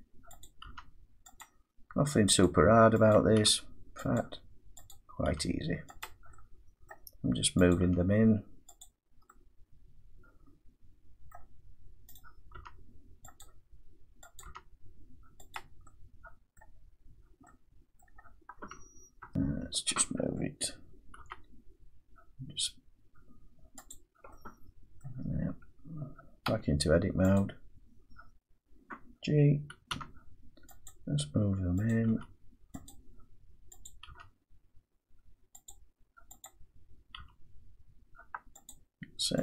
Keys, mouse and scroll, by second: 0.4 click, 0.6 g, 1.4 click, 2.4 click, 3.3 click, 3.4 g, 4.1 click, 4.9 click, 5.3 g, 6.0 click, 6.9 middle click, 7.7 click, 7.8 g, 8.8 click, 11.3 middle click, 12.1 click, 12.5 g, 13.4 click, 14.4 click, 14.4 g, 15.5 click, 16.5 middle click, 18.0 middle click, 18.7 scroll down 3, 19.2 Tab, 21.2 g, 23.9 click, 25.0 middle click, 26.5 Tab, 27.4 click, 29.9 g, 30.9 click, 31.9 click, 32.1 g, 32.9 click, 33.9 click, 34.1 g, 35.7 click, 36.5 click, 37.2 g, 38.7 click.